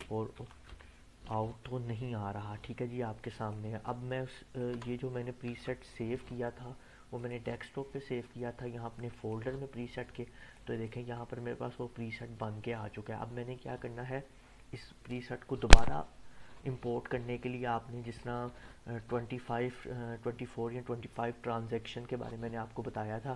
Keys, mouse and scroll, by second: 0.0-1.2 typing, 3.5-4.7 click, 4.7 BackSpace, 7.1 click, 18.0 click.